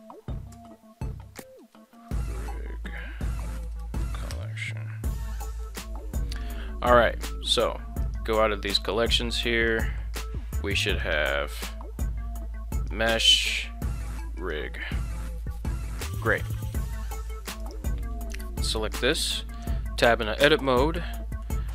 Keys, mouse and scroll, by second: 3.1 l, 9.7 click, 12.7 click, 13.1 click, 14.1 click, 14.4 click, 17.1 shift+middle drag, 17.6 right click, 19.2 Tab, 20.5 shift+middle click, 21.1 middle click.